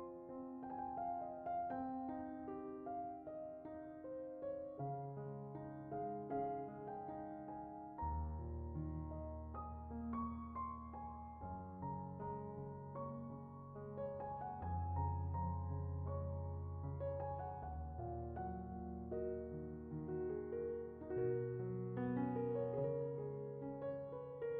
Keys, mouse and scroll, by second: 0.2 click, 0.4 Tab, 1.0 Tab, 1.2 click, 3.6 click, 4.2 middle click, 4.7 Tab, 5.1 click, 5.2 scroll down 2, 5.3 middle click, 7.1 Tab, 7.2 middle click, 8.0 alt+click, 8.5 middle click, 9.2 alt+s, 9.7 middle click, 11.4 middle click, 11.7 middle click, 12.3 alt+click, 12.5 middle click, 14.0 middle click, 15.8 middle click, 17.0 middle click, 17.9 middle click, 18.4 click, 18.5 middle click, 18.6 Tab, 18.7 middle click, 19.1 middle click, 20.7 middle click, 21.2 click, 21.7 middle click, 22.1 shift+click, 22.2 shift+click, 22.8 middle click, 23.1 click, 23.5 alt+s, 24.2 middle click.